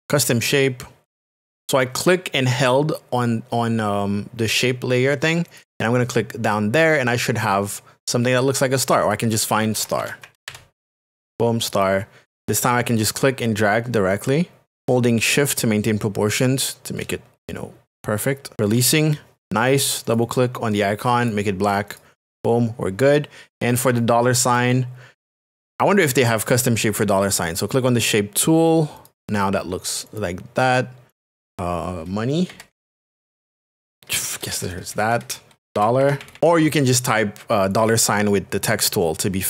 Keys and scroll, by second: 9.5-11.0 typing, 17.0 shift+space, 24.5 space, 32.2-34.2 typing, 35.5-36.9 typing.